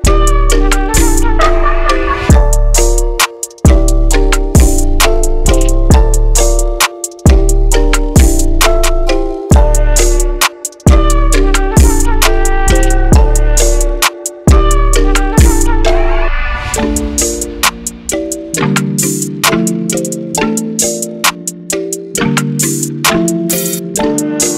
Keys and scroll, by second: 12.3-13.2 typing, 16.3 typing, 19.2-19.9 typing, 23.2 5.